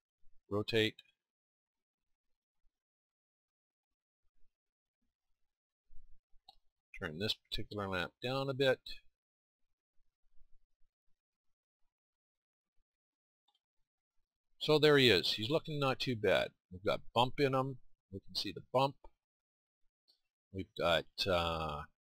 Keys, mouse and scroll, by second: 0.4 r, 5.1-8.3 drag, 8.3-11.2 middle drag, 12.4-19.0 middle drag.